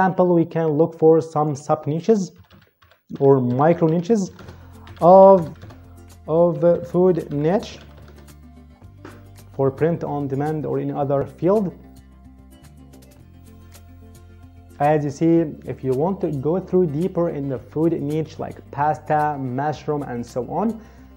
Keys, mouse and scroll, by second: 1.2 click, 2.0-8.3 typing, 9.6 Return.